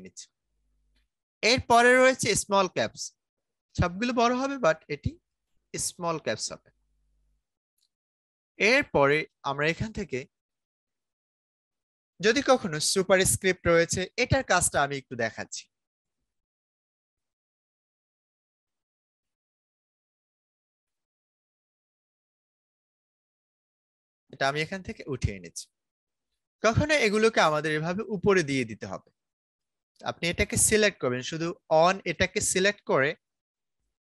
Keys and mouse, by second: 2.6-6.2 drag, 15.0-17.0 drag, 19.2 a, 22.5-33.6 drag.